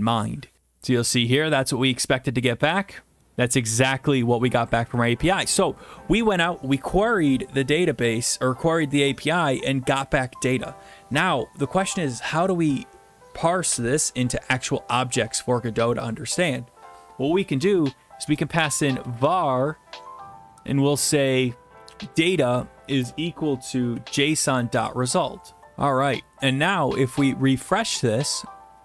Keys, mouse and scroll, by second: 0.6-1.7 drag, 3.2 alt+Tab, 4.7 click, 16.1-17.1 drag, 18.2 Return, 18.6-19.0 typing, 21.8-22.9 typing, 24.0-25.0 typing, 27.3-28.3 drag.